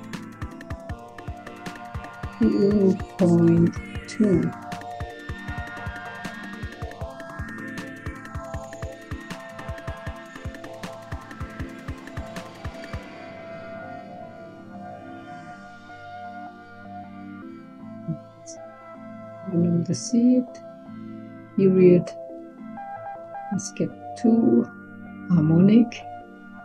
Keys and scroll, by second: 2.0-3.4 typing, 4.7 BackSpace, 4.9 BackSpace, 5.3 Return, 9.9 c, 22.7 2, 26.5 1.